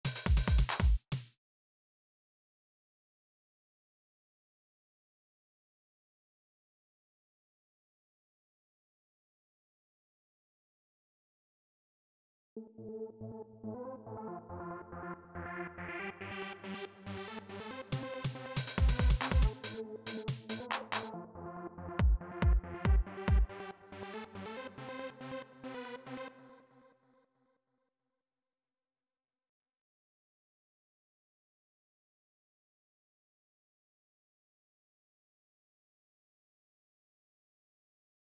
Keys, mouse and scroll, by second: 0.8 space, 1.2 click, 2.1 click, 4.4-5.8 drag, 6.5-7.5 drag, 8.0-9.7 drag, 11.7 click, 12.3 space, 13.2 click, 14.3 click, 17.8-19.2 drag, 22.8 click, 24.5 click, 26.0 click, 27.0 space, 27.7 click, 28.9-31.5 drag, 34.1 right click, 34.8 click.